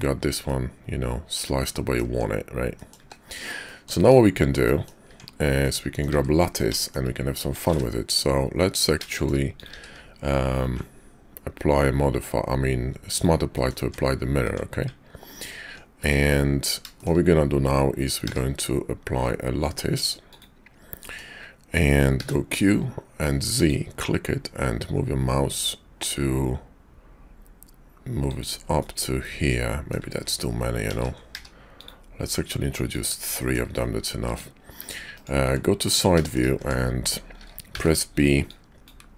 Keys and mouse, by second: 0.5-2.0 middle drag, 2.1 Tab, 2.7 click, 3.0 `, 3.6 click, 4.0 Tab, 4.6 click, 5.1 Tab, 5.6 click, 6.1 `, 6.7 shift+click, 7.6 ctrl+a, 9.0 shift+click, 9.5 click, 9.7 q, 13.6 click, 13.8 Tab, 14.5 Tab, 14.9 Tab, 16.0 `, 17.0 shift+click, 18.2 q, 21.0 click, 22.2 q, 28.7-29.9 drag, 30.8 ctrl+z, 31.1 q, 33.3 click, 33.7 `, 34.3 `, 35.4 `, 36.2 shift+click, 36.5 Tab, 37.7 b.